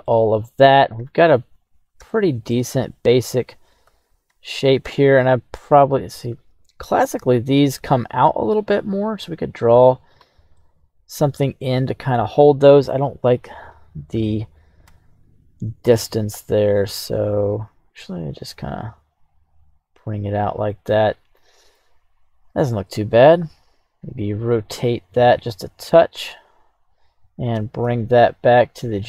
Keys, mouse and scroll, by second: 0.0 middle click, 0.5 scroll up 1, 0.9 KP_1, 1.7 scroll up 1, 2.0-2.5 shift+middle drag, 3.1 right click, 3.8 g, 4.2 x, 8.2 click, 8.4 g, 9.0 z, 10.0 click, 10.5-12.9 middle drag, 13.2 right click, 14.9 KP_1, 16.7 g, 17.1 x, 19.8 click, 20.2 right click, 20.7-21.7 middle drag, 22.0-22.8 right drag, 23.4 r, 23.9 x, 26.9 right click, 27.7 shift+s.